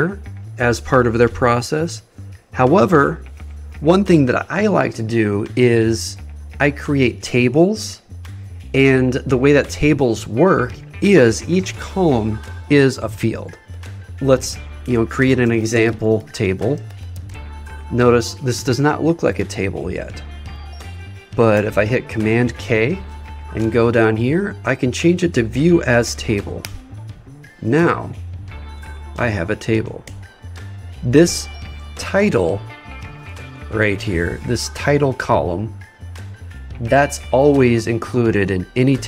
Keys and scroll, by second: 15.5 shift+e, 21.5 super+k.